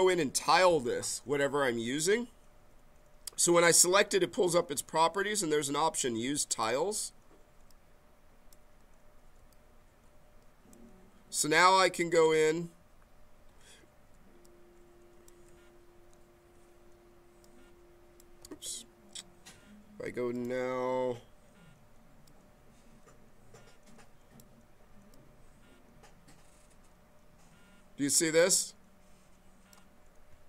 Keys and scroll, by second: 9.3 s, 14.1 b, 18.5 ctrl+z.